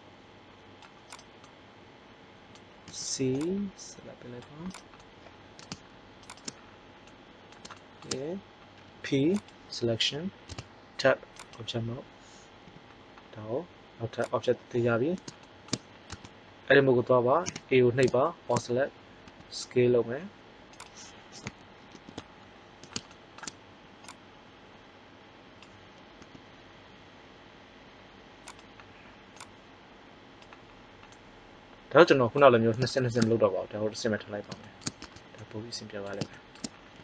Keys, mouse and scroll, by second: 1.1 click, 1.9-3.2 middle drag, 2.8 c, 3.2 click, 5.0 middle click, 6.2-7.4 drag, 8.6 p, 10.4 Tab, 11.3 right drag, 12.6 g, 14.3-15.4 drag, 16.1 Tab, 17.4 a, 19.2 s, 21.9 ctrl+KP_3, 24.0-25.5 drag, 26.1 e, 28.5 click, 31.1 middle click, 35.0 Tab.